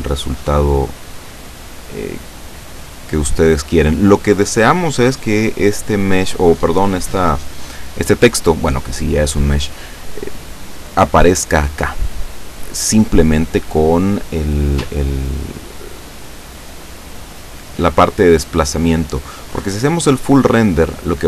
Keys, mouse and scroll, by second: 0.3 click, 1.8 click, 4.8 scroll up 1, 13.9-14.6 scroll down 1, 15.3 scroll down 1, 18.1 click, 19.1 click, 20.9 click.